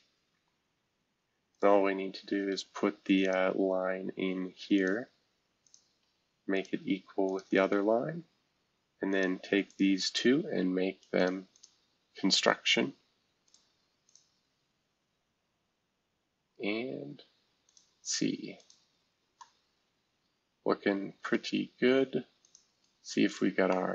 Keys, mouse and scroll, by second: 1.5 click, 3.2 click, 4.7 click, 5.6 click, 6.0 Escape, 6.5 click, 7.3 shift+click, 7.6 e, 9.1 click, 9.7 click, 11.2 click, 11.5 click, 13.4 click, 14.1 click, 16.3-17.6 scroll down 2, 17.6-18.7 drag, 19.1 scroll down 1, 19.4-22.4 middle drag, 21.5 scroll down 2, 22.4 click, 23.3 click, 23.7-23.9 middle drag.